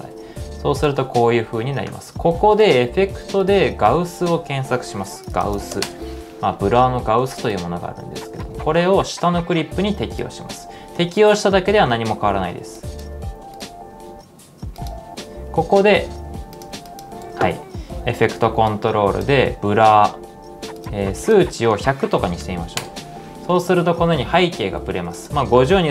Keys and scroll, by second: 5.1-6.2 typing, 15.7-16.6 typing, 17.8-19.3 typing, 21.6-22.9 typing, 25.5-25.9 typing.